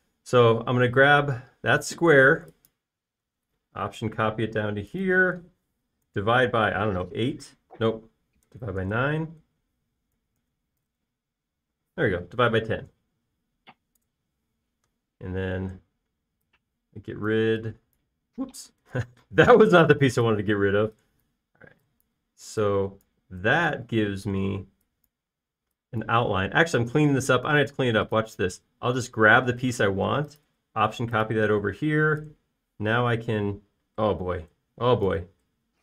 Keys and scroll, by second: 0.8 m, 7.2 alt+/, 8.0 8, 8.2 Return, 9.4 /, 9.8 9, 9.9 Return, 11.5-11.8 typing, 12.0 Return, 15.2 Return, 15.7 e, 20.0 super+z, 27.7 space, 30.5 m, 32.6 space.